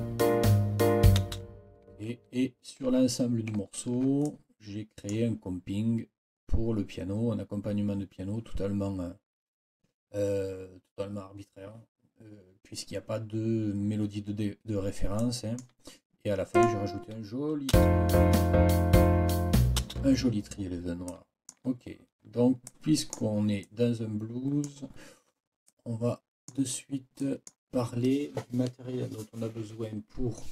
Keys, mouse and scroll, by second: 1.2 space, 2.0-2.4 ctrl+scroll down 2, 3.7 ctrl+scroll down 2, 4.2-5.3 ctrl+drag, 15.2 click, 16.5 click, 17.7 space, 19.8 space, 21.1 click, 21.8 ctrl+scroll up 2, 22.7-23.2 scroll up 2, 23.0 click, 23.2 click, 23.6-24.8 drag, 25.7 click, 26.1-26.5 scroll up 3, 26.5 click, 27.2 click.